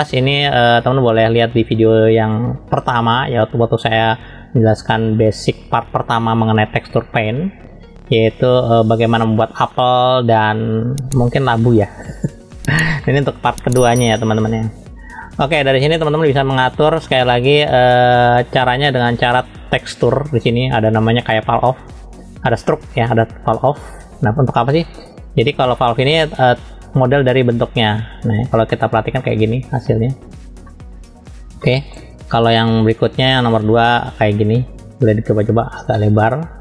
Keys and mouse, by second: 13.0 middle click, 14.3 shift+middle click, 15.1 middle click, 16.2 ctrl+x, 17.7 ctrl+z, 23.9-26.3 drag, 27.3-28.4 drag, 28.7 middle click, 29.5 shift+middle click, 30.6 middle click, 31.6 shift+middle click, 33.1-34.2 drag, 34.7 click.